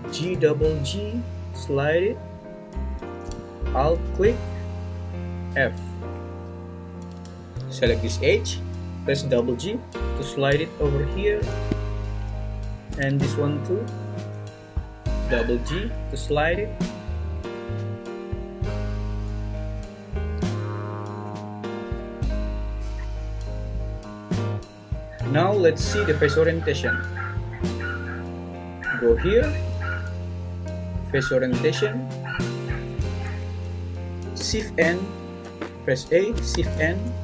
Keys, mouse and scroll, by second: 0.1 g, 0.2 g, 2.1 click, 5.5 f, 9.1 g, 9.3 g, 13.7 click, 15.2 g, 15.4 g, 21.2 `, 25.1 ctrl+z, 26.3-28.4 drag, 28.7 click, 29.8-31.9 drag, 34.0 a, 34.0 s, 34.6 shift+n, 35.4 Escape, 36.5 shift+n.